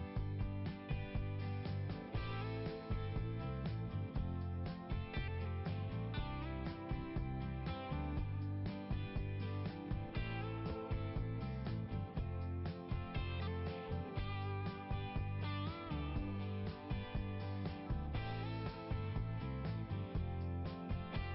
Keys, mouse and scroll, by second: 8.3 scroll down 1, 9.0 scroll down 1, 10.1 scroll down 1, 12.5 scroll down 1, 13.1 click, 14.7 click, 15.6 click, 16.9 click, 17.9 click, 18.9 click, 20.9 click, 21.1 click.